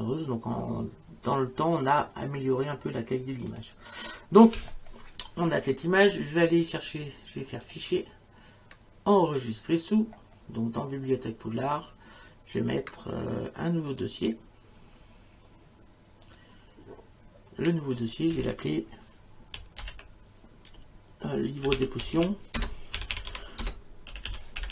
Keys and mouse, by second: 3.5 click, 7.6 click, 9.1 click, 13.9 right click, 16.3 click, 19.8 shift+l, 21.5-24.7 typing.